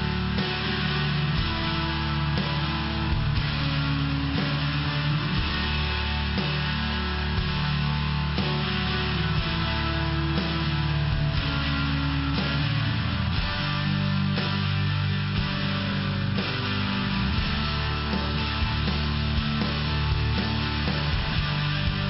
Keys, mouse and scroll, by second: 1.5 click, 2.0 click, 3.0 click, 4.8 click, 4.9 click, 5.9 click, 6.0 click, 7.4 click, 8.2 click, 8.4 click, 8.7 click, 9.1 click, 9.3 click, 11.0 click, 11.2 click, 11.5 click, 11.7 click, 12.3 click, 12.4 click, 12.8 click, 12.9 click, 13.5 click, 13.7 click, 14.5 click, 15.1 click, 15.6 click, 16.2 click, 17.4 click, 17.7 click, 18.4 click, 19.0 click, 19.2 click, 19.5 click, 19.7 click, 20.0 click, 20.1 click, 20.4 click, 20.8 click, 21.0 click, 21.4 click, 21.4 double click.